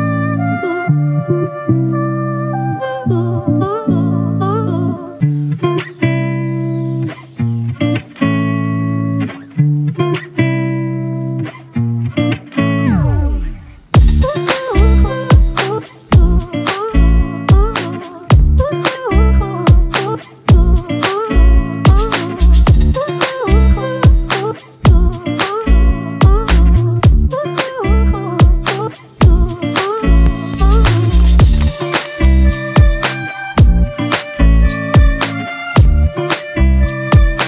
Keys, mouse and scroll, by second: 2.5-3.3 typing, 4.9 ctrl+t, 5.7 ctrl+t, 6.0 alt+shift+click, 12.7 Return.